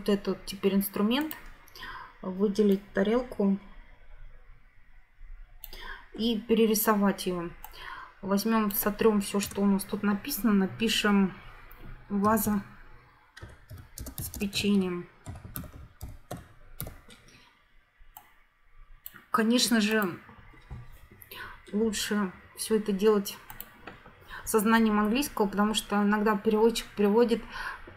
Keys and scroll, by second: 9.4 BackSpace, 12.0-16.9 typing.